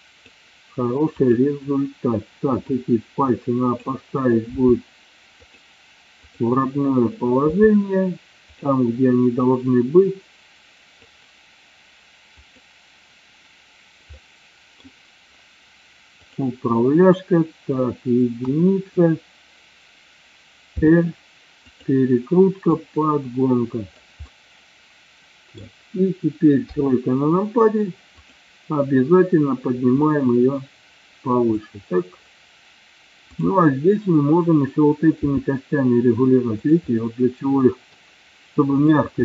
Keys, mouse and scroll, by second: 1.3 click, 2.8-3.9 drag, 4.5 r, 5.5 click, 9.4-11.2 drag, 12.6-13.0 drag, 14.2-14.9 middle drag, 18.4 KP_1, 20.9 r, 21.8 click, 22.8-24.0 drag, 24.4-25.7 middle drag, 26.7 KP_3, 28.2 click, 30.0-31.6 drag, 33.4 click, 35.2 r, 36.9-38.0 middle drag, 38.8-39.2 drag.